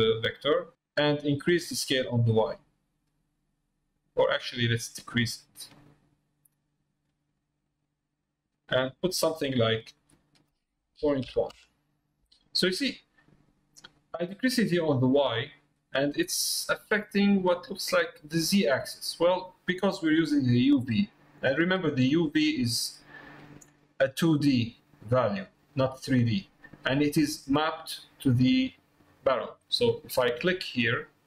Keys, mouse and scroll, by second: 2.4-7.5 drag, 9.0 click, 10.0-12.6 drag, 16.3 middle click, 17.7 middle click, 19.3 middle click, 22.5 middle click, 28.0 middle click, 30.1 Tab.